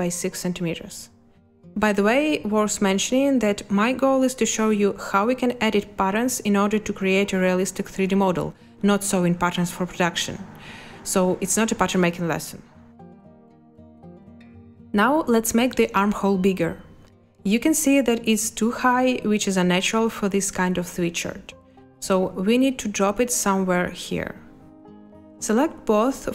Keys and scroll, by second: 3.4 6, 6.0 space, 22.7 space.